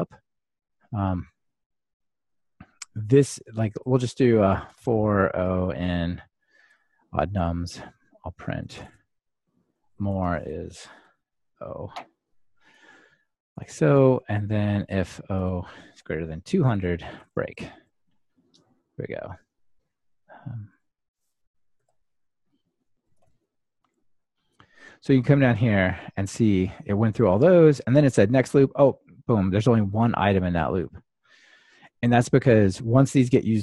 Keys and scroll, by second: 7.7 Return, 18.0 ctrl+r, 24.0 ctrl+r.